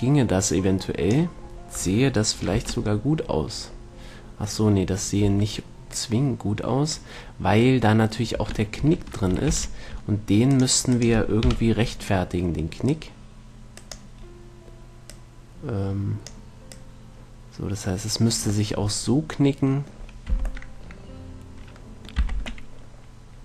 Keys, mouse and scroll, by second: 0.0 click, 0.6-1.6 right drag, 1.6 click, 2.1-3.8 middle drag, 2.8 Tab, 5.6 Tab, 6.3-8.2 drag, 8.7 Tab, 9.1 Tab, 9.8 ctrl+r, 11.4-12.7 drag, 11.8 KP_7, 15.3 middle click, 15.4-19.0 drag, 19.2 middle click, 20.1 middle click, 20.6 z, 21.1-22.6 middle drag, 22.5 z, 23.0-23.4 middle drag.